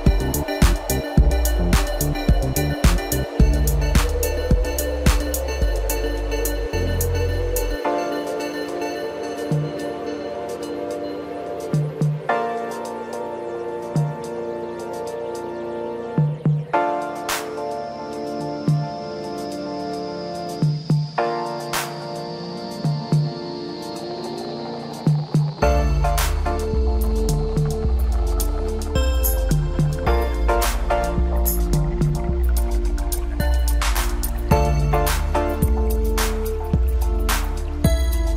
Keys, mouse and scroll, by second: 0.2 click, 1.2 shift+click, 1.4 shift+click, 1.9-3.4 middle drag, 3.4 click, 3.9-5.0 drag, 5.3 scroll down 2, 5.6-7.1 middle drag, 7.1 KP_1, 8.4 click, 8.9-9.5 scroll up 1, 9.5-11.0 scroll up 2, 11.0 2, 11.3 click, 12.5 ctrl+b, 16.7-19.9 drag, 19.9-20.2 scroll down 2, 20.2 middle click, 21.3 middle click, 22.0-23.0 scroll up 1, 23.0 3, 23.1 scroll up 2, 24.0 drag, 24.6-25.7 drag, 26.0 scroll down 2, 26.2-28.5 middle drag, 28.5 click, 28.8 scroll up 1, 29.1 middle click, 30.0 KP_7, 32.2 click, 34.3-36.5 middle drag, 36.5 shift+click, 37.9 click.